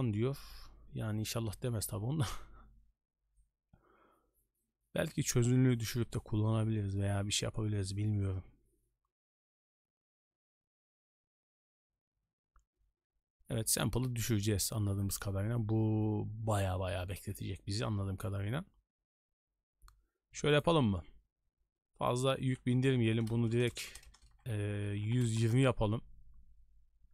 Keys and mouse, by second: 20.5 click, 22.1-25.6 drag, 23.7 BackSpace, 24.0 BackSpace.